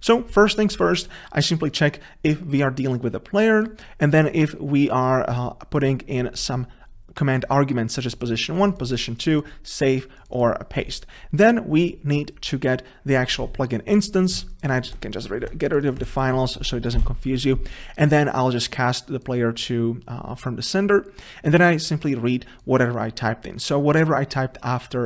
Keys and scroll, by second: 15.1 Delete, 17.1 Delete, 17.2 ctrl+s.